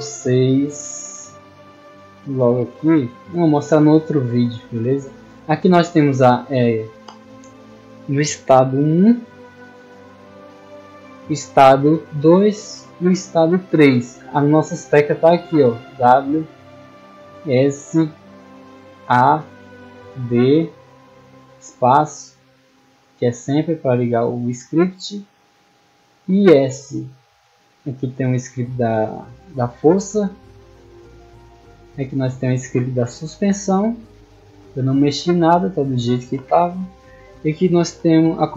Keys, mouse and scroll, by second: 0.6-0.9 shift+middle drag, 1.1-1.4 middle drag, 3.5 middle click, 4.0-4.4 middle drag, 5.5 middle click, 7.3 middle click, 8.1 middle click, 11.6 click, 13.1 click, 13.9 middle click, 15.3 click, 15.9 click, 16.6 click, 17.3 click, 18.3 click, 18.8 click, 19.3 scroll down 2, 20.4 click, 20.9 click, 21.5 click, 22.1 click, 22.9 click, 23.5 click, 24.2 middle click, 25.1 click, 25.5 middle click, 26.6 click, 27.1 middle click, 28.1 click, 28.5 click, 29.8 click, 31.0 click, 32.1 click, 32.8 click, 33.9 click, 35.3 click.